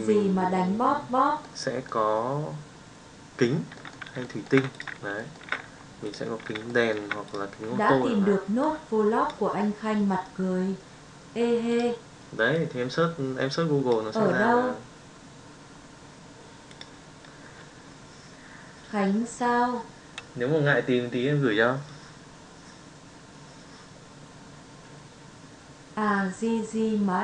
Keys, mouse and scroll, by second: 1.5-1.8 middle drag, 3.7-4.1 middle drag, 4.2 shift+middle drag, 5.1 shift+middle drag, 6.0 click, 6.6-6.9 shift+middle drag, 7.2 click.